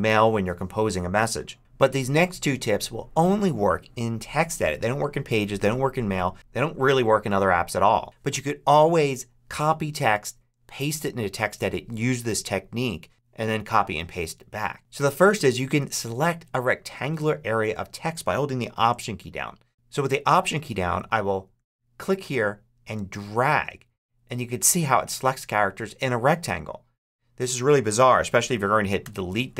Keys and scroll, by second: 28.9 BackSpace.